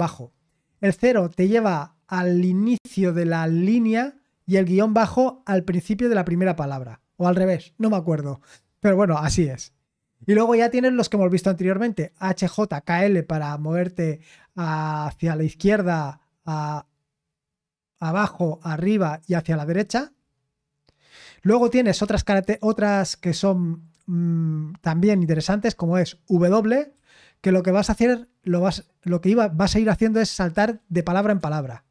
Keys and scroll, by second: 20.0-20.5 scroll down 1, 20.8-21.3 scroll down 1, 26.6-27.4 typing, 30.5-31.9 typing.